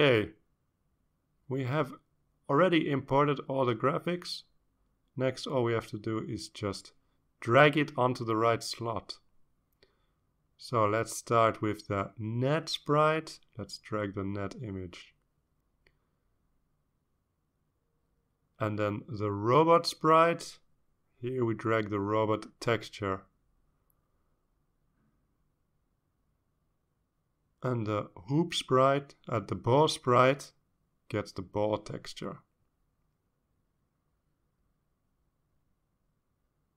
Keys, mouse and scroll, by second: 4.6 click, 5.3-8.1 drag, 8.5-8.9 scroll up 1, 9.0 scroll down 1, 10.2-11.2 drag, 12.2-13.6 drag, 14.4-16.9 drag, 20.5 click, 22.8-25.0 drag, 26.2 click, 28.8-31.0 drag, 32.8-35.1 drag, 35.5 click.